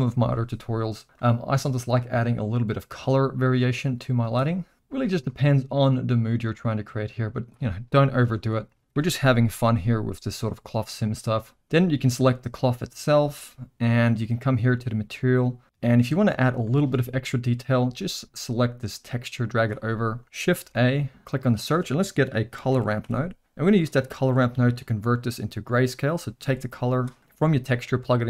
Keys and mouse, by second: 1.0 click, 5.2 click, 11.2 click, 13.3-14.3 middle drag, 15.6 middle click, 16.7 shift+middle drag, 17.4 middle click, 18.4-19.7 drag, 20.0 middle click, 20.6 shift+a, 24.8-27.0 drag, 27.5-28.2 drag.